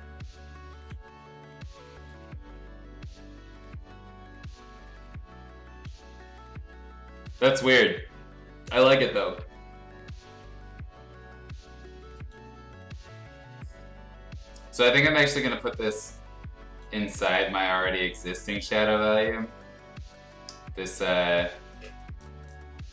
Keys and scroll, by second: 9.2 ctrl+g.